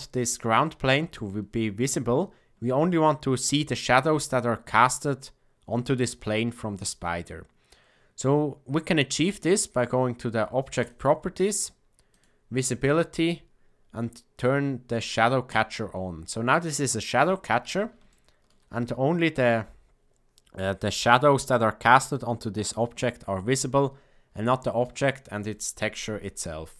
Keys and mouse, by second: 10.8 click, 12.1 click, 15.4 click, 18.0-18.4 shift+middle drag, 24.4-24.7 shift+middle drag.